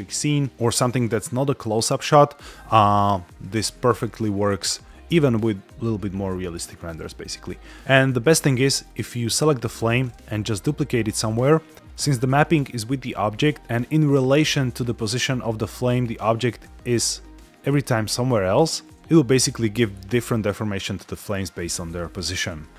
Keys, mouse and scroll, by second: 7.8 space, 8.8 click, 9.8 alt+d, 11.0 click, 11.8 middle click, 11.8 click, 13.1-13.5 scroll down 5, 13.6-14.1 scroll up 2, 14.9 middle click, 15.3 scroll down 2, 15.7 shift+middle drag, 16.6 alt+d, 18.5 ctrl+click.